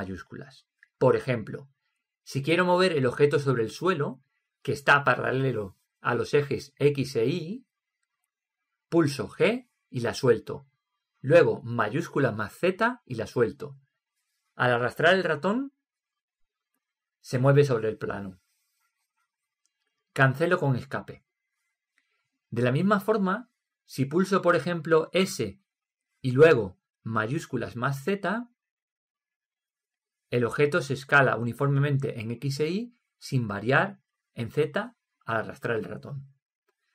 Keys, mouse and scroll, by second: 9.8 g, 22.6-24.4 middle drag, 25.5 s, 25.9 s.